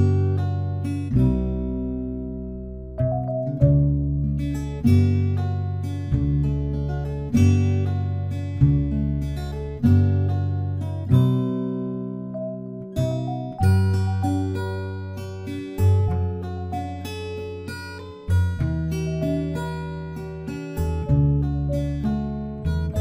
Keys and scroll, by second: 2.6 ctrl+j, 8.7 ctrl+t.